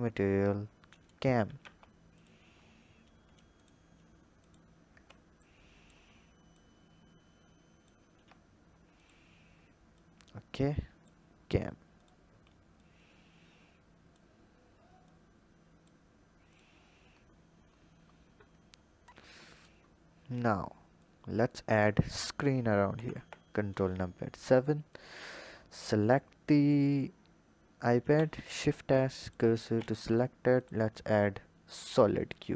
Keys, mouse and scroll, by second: 2.5-3.4 scroll down 5, 3.4 click, 4.2 click, 4.8 Tab, 5.3 click, 6.4 click, 7.9 Tab, 8.8 shift+click, 9.8 click, 11.7 drag, 12.6 click, 14.9 click, 16.3 click, 16.7-19.1 scroll down 18, 19.1 click, 19.6-20.8 scroll down 2, 20.8-22.7 drag, 22.7 ctrl+KP_7, 23.6-24.7 scroll down 3, 24.7-25.6 drag, 27.9 shift+s, 29.6 shift+a, 31.6 drag, 32.2-32.5 scroll up 4.